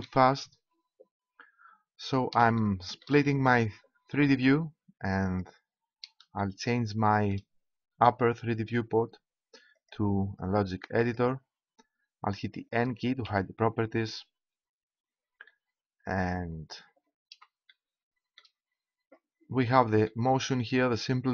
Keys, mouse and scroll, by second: 4.3-5.4 middle drag, 13.2 n.